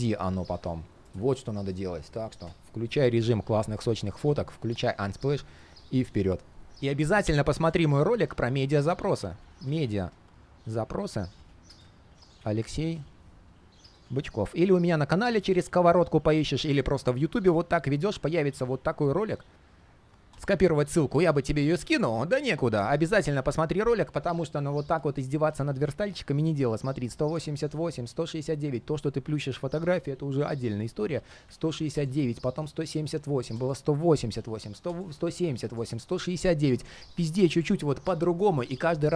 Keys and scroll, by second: 7.4 super+space.